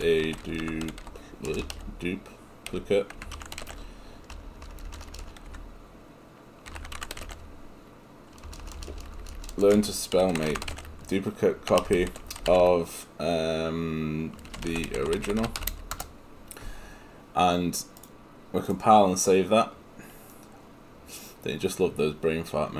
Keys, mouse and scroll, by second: 1.5 BackSpace, 4.4 BackSpace, 17.0 Return.